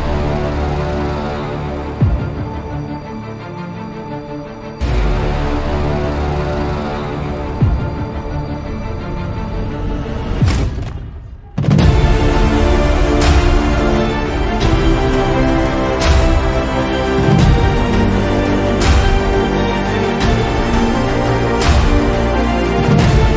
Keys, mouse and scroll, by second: 0.2 click, 0.7 click, 2.5-10.5 drag, 11.2-13.2 drag, 12.8 KP_0, 15.8 click, 16.2 click, 18.2 click, 22.2 click.